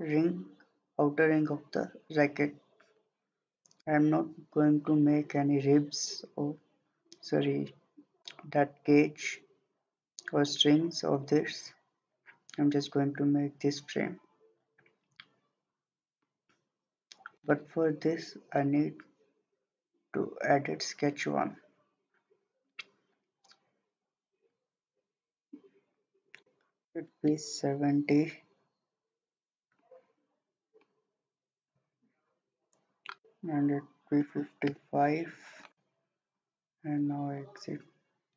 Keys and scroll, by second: 26.6-27.4 typing, 34.0-34.7 typing.